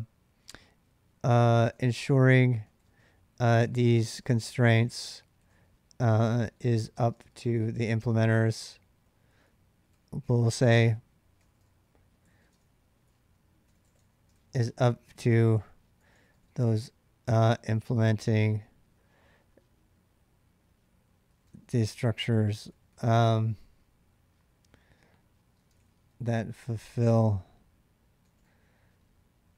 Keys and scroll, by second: 1.2-18.6 typing, 10.3 ctrl+[, 10.4 ctrl+h, 20.9-23.2 typing, 25.2-26.9 typing, 28.0 typing.